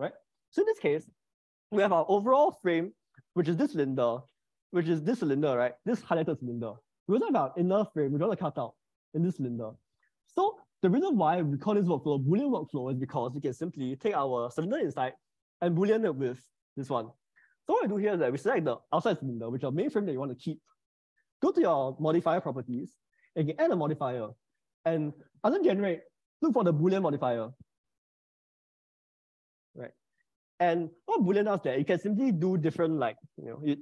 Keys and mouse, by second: 3.3 click, 5.1 click, 13.9-16.5 middle drag, 23.8-28.9 drag.